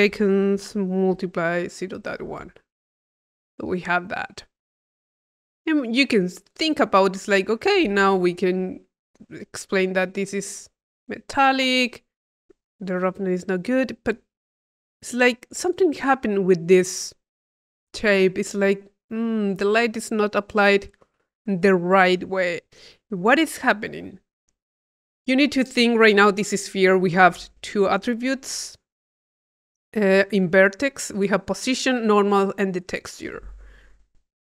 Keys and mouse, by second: 5.1 click, 6.2 click, 7.0 click, 9.0 click, 9.8-13.8 drag, 14.4-17.0 drag, 17.2-19.0 drag, 22.8-24.7 drag, 26.4 middle click.